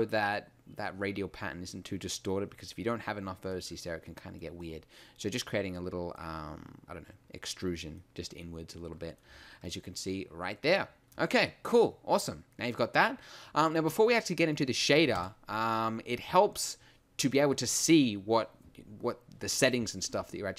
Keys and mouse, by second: 9.3 Tab.